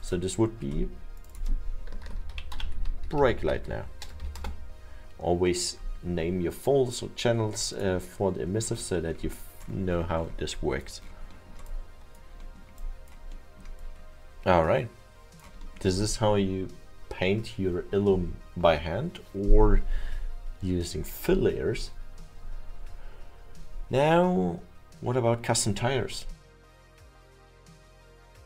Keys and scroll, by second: 1.9-4.1 typing, 6.6 Return.